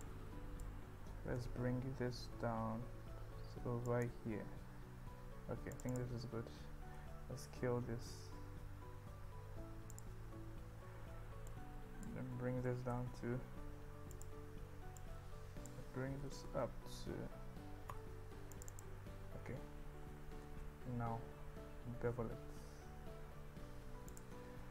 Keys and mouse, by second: 0.0 click, 1.4 g, 1.7 z, 6.0 click, 6.9 s, 10.0 click, 11.5 click, 12.7 g, 13.0 z, 14.3 click, 15.1 click, 16.3 g, 16.6 z, 18.6 click, 18.8 click, 20.5 ctrl+b.